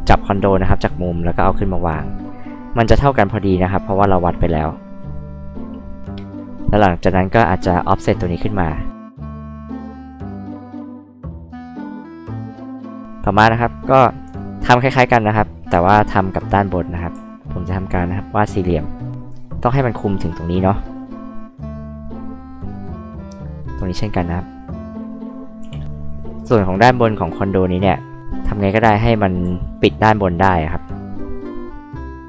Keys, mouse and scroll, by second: 3.1-5.1 drag, 3.1-5.1 right drag, 7.6 p, 8.5 click, 10.5 click, 13.0 scroll down 2, 13.1 click, 14.2 click, 14.6 drag, 17.1 r, 18.3 click, 21.1 click, 24.3 click, 25.2 click, 25.6 h, 25.8 click, 26.0 click, 26.5 r, 27.1-27.7 scroll up 2, 28.0 click, 28.9 ctrl+z, 29.4 ctrl+z, 30.4 r, 31.1 click.